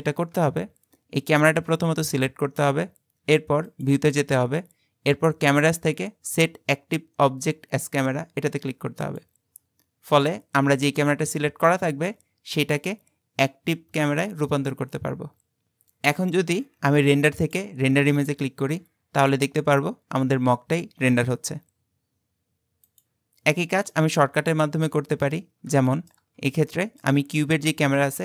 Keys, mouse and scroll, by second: 3.7-6.8 drag, 17.4-20.6 drag, 24.0 middle click, 24.5-25.9 scroll down 17, 25.9 shift+middle click, 26.4 scroll down 1, 26.7-28.2 shift+middle drag.